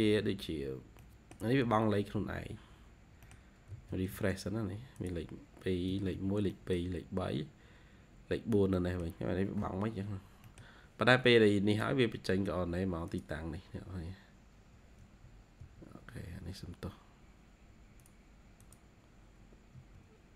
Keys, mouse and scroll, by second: 0.9 middle click, 1.4-2.3 scroll down 3, 2.3-3.1 scroll up 4, 3.1 middle click, 3.4-6.1 typing, 4.4 scroll up 1, 5.3 scroll down 1, 6.4 middle click, 8.3 scroll down 2, 8.6 middle click, 10.3 middle click, 10.5-11.5 scroll down 1, 13.3 ctrl+q, 14.9 Escape, 15.5 Escape, 18.7 ctrl+q, 19.6 Escape.